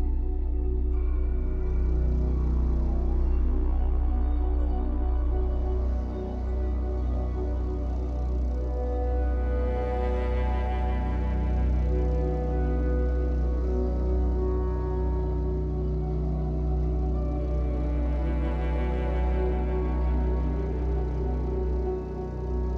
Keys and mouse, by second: 0.8 click, 2.2 click, 3.3 ctrl+click, 6.1-7.5 drag, 8.4 ctrl+click, 9.3-13.0 ctrl+drag, 17.3 click, 18.4 click, 18.6 click, 19.0 click, 19.6 drag, 20.3 click.